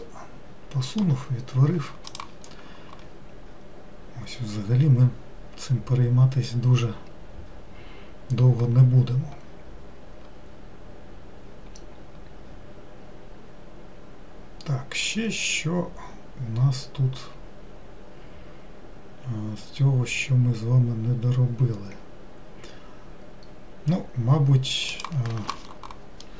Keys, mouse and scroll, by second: 0.5-1.8 middle drag, 1.8-2.2 scroll down 1.